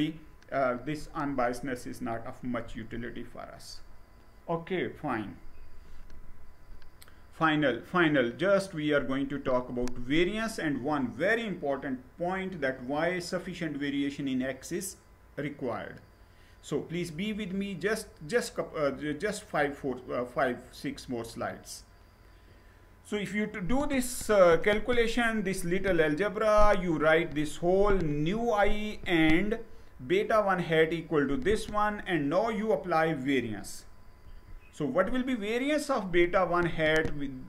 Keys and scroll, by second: 2.3 Down, 33.8 Down.